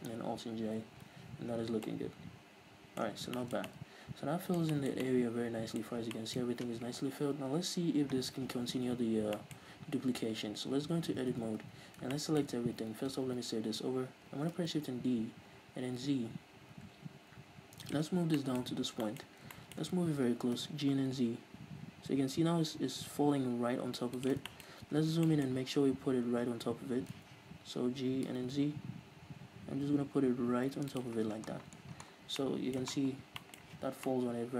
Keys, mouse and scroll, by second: 0.7 alt+j, 1.2 z, 1.6 scroll down 2, 1.7 Tab, 3.2 scroll down 2, 7.4 KP_1, 8.2-9.3 scroll up 2, 9.3 scroll up 1, 10.7 Tab, 11.1 a, 13.2 ctrl+s, 14.6 shift+d, 18.0 shift+click, 18.1-19.6 scroll up 6, 18.4-24.3 shift+middle drag, 20.3 g, 24.3 shift+click, 24.5-28.0 shift+middle drag, 24.7-27.2 scroll up 4, 27.2 z, 28.0 g, 31.1 shift+click, 31.2-31.6 scroll down 1, 32.4-34.5 middle drag, 32.8 scroll up 2, 33.0-33.4 scroll down 2, 33.8 z.